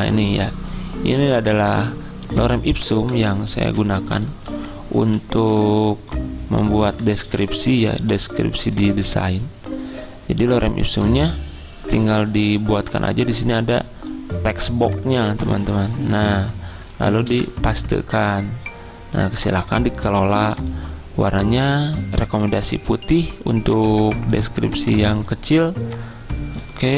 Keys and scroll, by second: 3.2 ctrl+shift+Down, 5.1 ctrl+shift+Down, 7.4 ctrl+c, 17.4 ctrl+v.